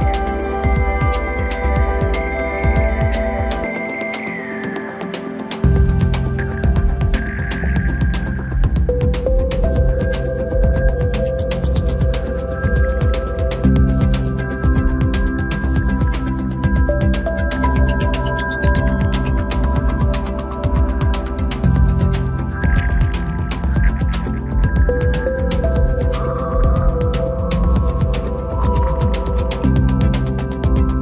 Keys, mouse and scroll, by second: 4.5-4.8 scroll down 2, 4.8-6.0 middle drag, 6.0-6.7 scroll up 1, 6.7 g, 10.8-11.4 scroll down 2, 11.4 KP_0, 12.2 scroll up 2, 12.3-12.9 scroll down 2, 12.9 KP_3, 13.6 scroll up 1, 13.8-14.4 scroll down 2, 14.4 scroll down 1, 14.6 ctrl+KP_3, 15.3-16.4 scroll up 2, 16.4-17.8 shift+middle drag, 17.8 ctrl+alt+KP_0, 19.8 Tab, 20.7 click, 22.7-23.2 scroll down 2, 23.2 KP_7, 23.8-24.4 scroll down 1, 24.4 scroll down 1, 24.6-26.3 shift+middle drag, 26.3 g, 28.8-31.0 drag.